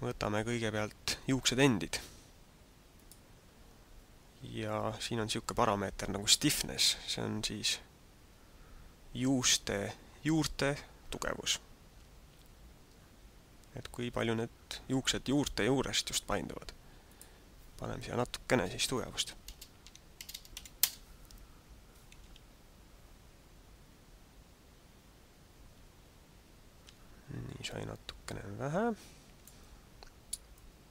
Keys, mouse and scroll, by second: 3.0 click, 17.0 click, 22.4 alt+a, 27.0 alt+a, 28.2 click, 30.5 click.